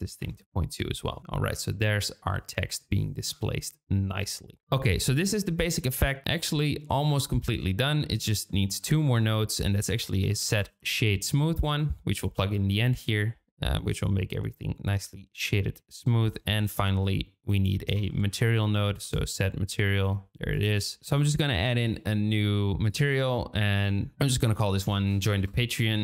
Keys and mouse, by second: 7.0 click, 8.6 shift+middle click, 8.9 shift+a, 14.9 click, 15.4 click, 16.6 shift+a, 22.9 click, 23.7 click, 24.1-26.0 shift+drag.